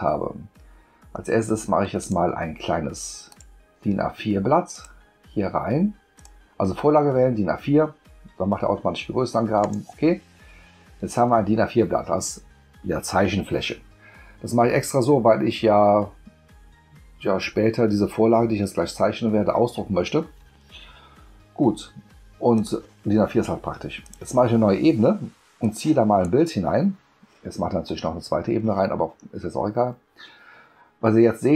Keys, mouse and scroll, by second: 2.0 click, 3.3 click, 4.7-6.2 drag, 9.6 click, 22.5 click, 24.0 click, 25.6 click.